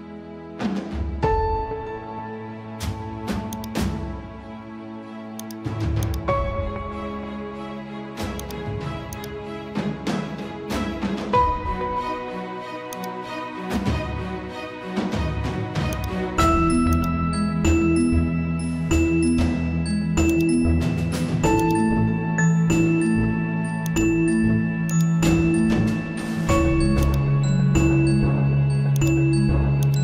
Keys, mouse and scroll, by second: 2.3 ctrl+t, 3.5-15.9 drag, 15.9-20.3 ctrl+drag, 20.3-27.1 ctrl+drag.